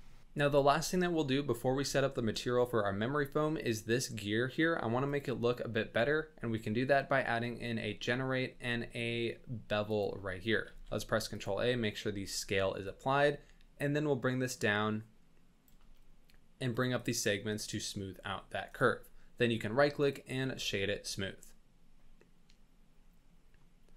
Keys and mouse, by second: 5.1-10.0 drag, 10.6 ctrl+a, 12.9 shift+click, 13.6-15.6 shift+drag, 16.7 click, 17.1 click, 17.6 click, 18.8-20.2 drag, 20.8-23.5 middle drag.